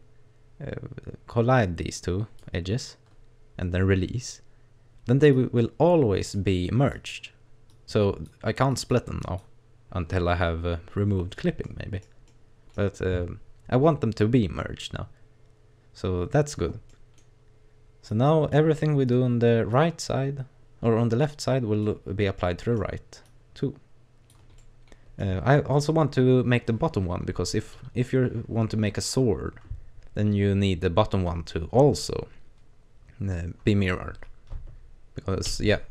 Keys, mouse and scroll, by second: 5.3 click, 7.0 click, 7.7 click, 8.8 click, 9.2 click, 11.7 middle click, 12.3 middle click, 16.9 middle click, 17.5-18.1 scroll down 1, 18.1 click, 19.1 right click, 19.7 click, 22.1 scroll down 2, 22.4 middle click, 23.3 click, 24.6 middle click, 35.5 ctrl+r.